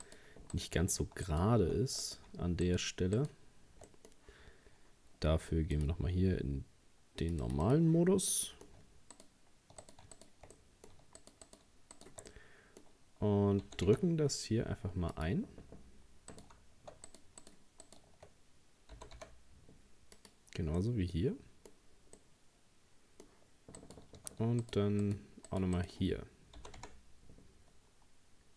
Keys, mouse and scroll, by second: 0.1 right click, 0.5 shift+right click, 1.3 alt+shift+right click, 2.0 right click, 2.7 shift+right click, 3.2 shift+right click, 3.9-5.1 middle drag, 5.1-5.5 scroll down 1, 5.8-8.0 drag, 8.3 middle click, 9.2 shift+right click, 9.8 right click, 10.2 shift+right click, 10.6 middle click, 11.2 shift+right click, 11.5 shift+right click, 12.0 shift+right click, 12.3-13.6 middle drag, 13.6 g, 16.4 right click, 17.1 shift+right click, 17.4 shift+right click, 17.9 shift+right click, 19.0 g, 20.8-23.8 middle drag, 23.8 right click, 24.6 shift+right click, 25.0 shift+right click, 25.5 shift+right click, 25.8 shift+right click, 26.6 g.